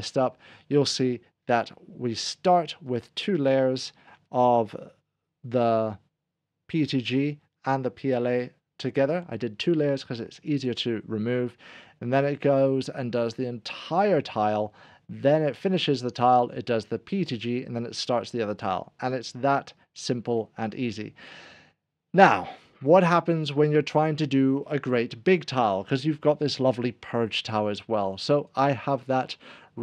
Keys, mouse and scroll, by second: 2.9 click, 12.2 click, 23.2 scroll down 1, 28.4 1, 28.5 click.